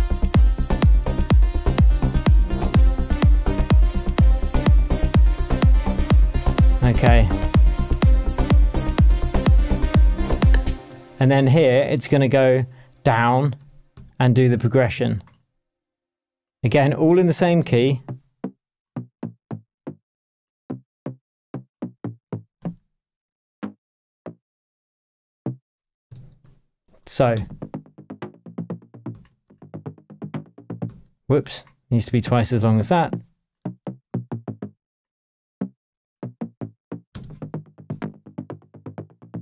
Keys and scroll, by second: 0.7 super+d, 4.4 super+d, 8.0 super+d, 10.7 space, 13.5 space, 18.9 Down, 19.4 Down, 21.7 Down, 22.6 Up, 26.2 shift+Tab, 27.3 space, 29.1 space, 30.4 space, 30.8 space, 33.6 Up, 34.0 Down, 36.1 Down, 36.8 Up, 37.1 space, 37.7 shift+space, 37.9 shift+Tab.